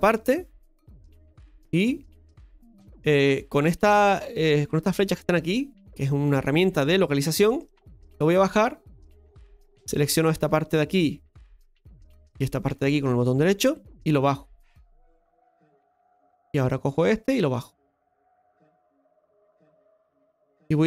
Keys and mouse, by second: 0.0 shift+right click, 0.3-2.1 middle drag, 2.1 click, 5.4-9.0 drag, 9.8 right click, 10.7 right click, 11.6 right click, 12.6 shift+right click, 13.6-15.6 drag, 16.4 right click, 17.4-18.9 drag, 19.5 middle click, 20.5 right click, 20.6 middle click.